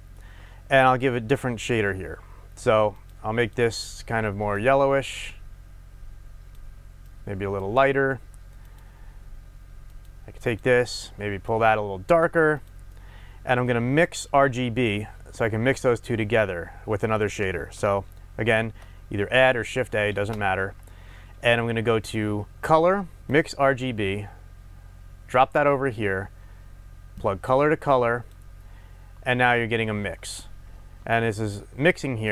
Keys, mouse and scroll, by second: 2.9 drag, 3.4 click, 8.9 click, 9.9 click, 10.4 click, 12.6 drag, 12.9-25.6 middle drag, 20.1 shift+a, 25.6 click, 27.1-32.3 drag.